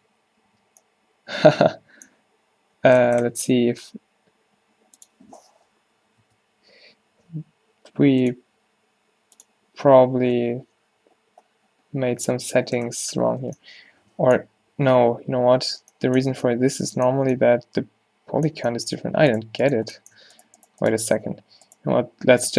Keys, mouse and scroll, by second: 0.6 z, 10.4-13.8 drag, 15.3 ctrl+z, 16.3 a, 21.5 a, 22.0 f.